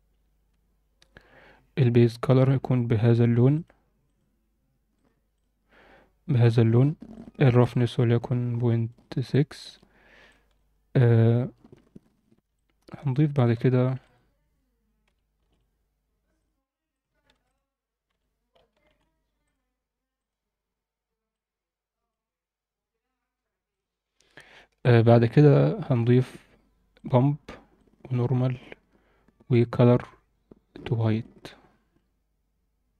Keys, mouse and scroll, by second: 1.0 click, 2.3 click, 4.9-5.7 right drag, 6.3 click, 7.1 drag, 7.7-8.9 drag, 9.2 alt+shift+middle click, 10.2 alt+shift+middle click, 12.5 alt+shift+middle click, 13.1 alt+shift+middle click, 13.8 shift+a, 17.3 shift+a, 21.3-22.1 drag, 24.8 click, 26.9 click, 27.7-28.6 drag, 29.5-31.4 drag.